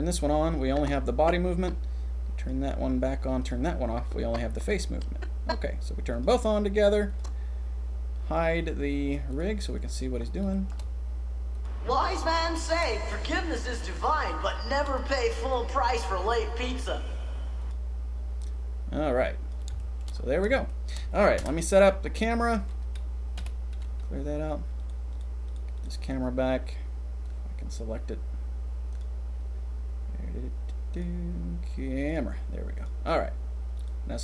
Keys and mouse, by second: 2.4 click, 3.4 click, 4.0-5.9 drag, 6.1 click, 7.1 click, 9.3 click, 9.4 middle click, 10.2 middle click, 10.5 shift+middle click, 11.6 middle click, 17.6 click, 19.2 click, 19.7-20.1 shift+middle drag, 20.5-20.9 shift+middle drag, 21.3 KP_0, 23.3 n, 25.1 click, 25.5 click, 27.2 click, 30.9 click, 32.0 click, 32.7 click, 33.7 click.